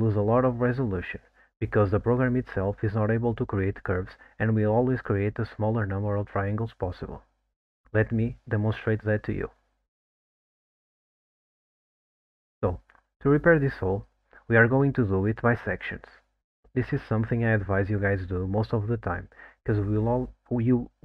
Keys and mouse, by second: 0.0 click, 0.5 middle click, 5.9 ctrl+t, 6.8-13.1 middle drag, 13.3 click, 13.7 middle click, 14.7 ctrl+z, 15.1 ctrl+z, 16.6 middle click, 17.2 alt+middle click, 18.0 alt+middle click, 18.9 alt+middle click, 19.4 middle click.